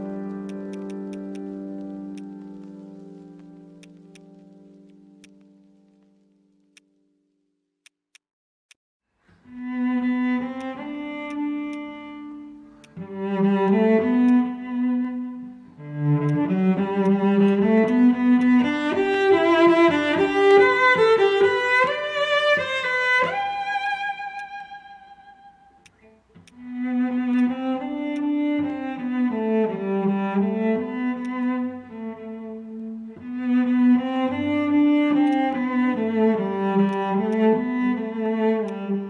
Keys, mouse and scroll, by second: 0.8 double click, 3.4 ctrl+z, 6.7 right click, 8.1 right click, 10.5 right click, 16.2 right click, 23.5-24.2 scroll up 1, 25.2 scroll up 1, 25.5 alt+middle click, 25.8 alt+click, 26.4 alt+click, 27.0 scroll up 1, 27.3 alt+click, 27.6 scroll down 1, 27.8 alt+middle click, 28.1 alt+click, 30.9 alt+middle click, 31.1 alt+click, 34.6 alt+middle click, 36.9 right click, 37.6 scroll up 1, 37.8-38.1 scroll down 1, 38.1-38.7 scroll up 1.